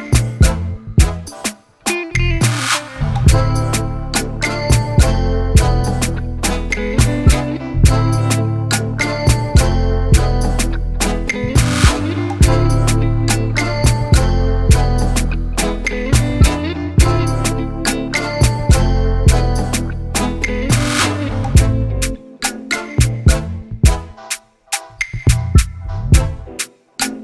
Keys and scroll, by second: 7.9 Down, 9.1 ctrl+0, 18.4 ctrl+z.